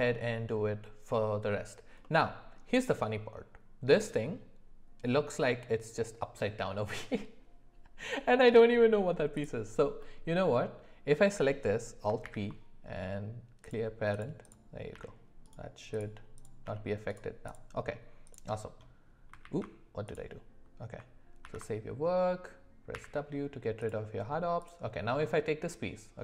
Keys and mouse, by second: 10.0 middle click, 12.2 alt+p, 14.4 click, 14.9 g, 16.6 g, 17.5 click, 19.4 ctrl+z, 20.1 click, 21.4 ctrl+s, 22.9 w, 23.8 click.